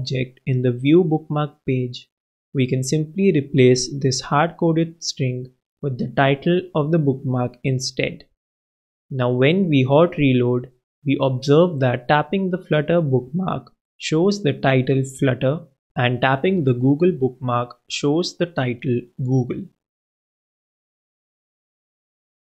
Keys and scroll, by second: 7.1 super+s.